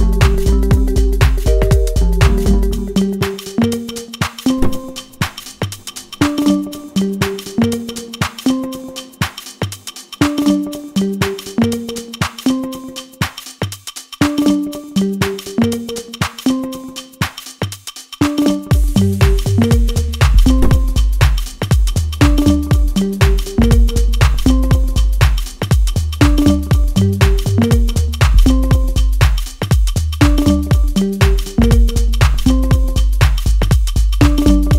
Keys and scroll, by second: 24.0 ctrl+z.